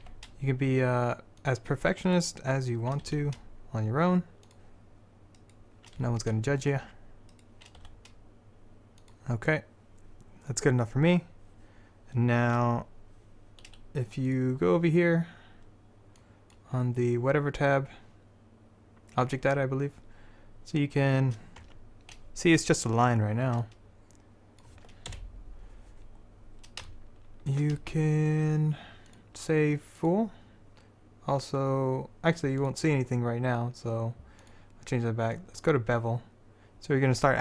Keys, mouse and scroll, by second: 0.2 g, 3.0-4.3 drag, 3.2 r, 5.6 click, 6.1 r, 6.9-7.9 drag, 7.9 r, 8.3 click, 14.4-16.5 drag, 21.7 Tab, 25.2 KP_7, 29.2-31.0 drag, 32.7-37.4 drag.